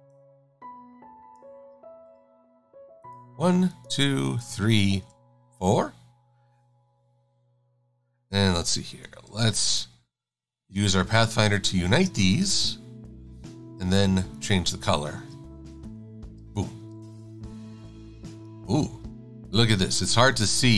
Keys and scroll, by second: 19.6 super+=.